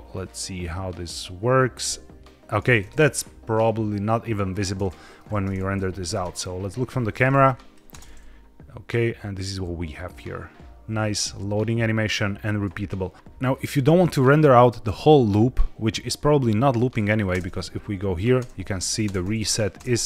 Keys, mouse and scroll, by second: 4.7-5.1 middle drag, 5.6 KP_1, 6.0 KP_0, 7.3 drag, 7.8 space, 13.4-13.7 scroll down 2, 13.7 middle click, 15.2 middle click, 16.7 click, 17.2 space, 18.3-20.0 typing, 18.7 click, 19.8 click.